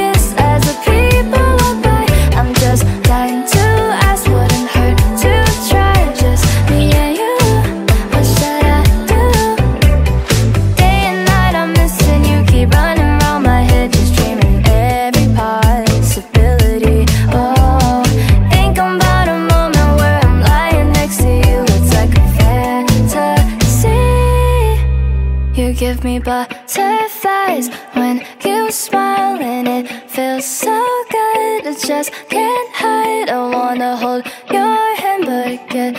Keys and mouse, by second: 1.3 alt+click, 1.9 click, 3.0 click, 3.8 click, 4.8 click, 5.0 alt+right click, 5.3 click, 7.0 click, 7.9 shift+8, 8.6 1, 9.2 click, 11.7 alt+click, 12.9 click, 15.8 alt+click, 16.7 click, 17.7 click, 17.8 click, 18.2 click, 18.4 alt+click, 18.5 click, 18.7 alt+click, 19.0 click, 19.4 alt+click, 21.1 r, 21.3 alt+click, 21.5 click, 22.2 alt+click, 22.5 click, 23.7 click, 24.1 click, 24.7 alt+click, 25.2 click, 25.7 click, 26.1 alt+right click, 27.0 click, 27.4 click, 28.5 alt+right click, 28.6 alt+click, 29.8 alt+right click, 29.9 alt+click, 30.6 click, 31.2 click, 31.4 click, 32.7 alt+click, 32.9 alt+right click, 33.1 click, 34.2 alt+click, 34.3 alt+middle click, 34.4 click, 35.8 alt+click, 35.8 alt+middle click.